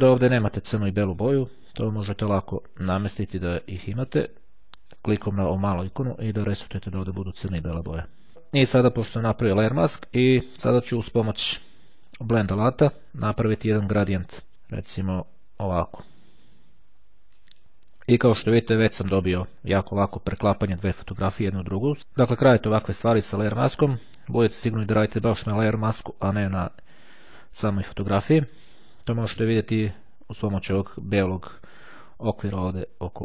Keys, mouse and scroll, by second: 0.4 click, 1.2 click, 1.8 click, 3.6 click, 5.5-6.7 drag, 12.2 click, 15.7-18.2 drag, 26.1 click.